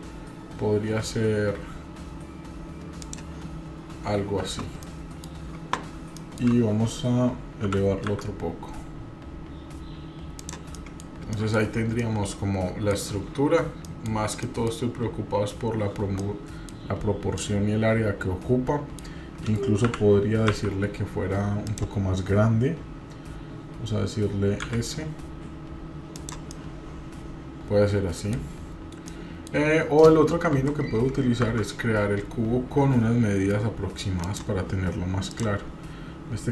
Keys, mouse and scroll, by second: 4.8-5.3 middle drag, 6.1 shift+middle click, 7.7 g, 10.7 middle drag, 11.0 scroll down 2, 11.3 shift+middle click, 12.0-12.9 middle drag, 13.8 shift+middle click, 14.4 shift+middle click, 16.3-16.7 middle drag, 17.4-19.0 middle drag, 19.8 g, 24.6 s, 26.5-28.5 middle drag, 29.0-29.5 middle drag, 29.8 scroll down 2, 30.5 Delete, 31.4 shift+a, 35.3-36.5 drag.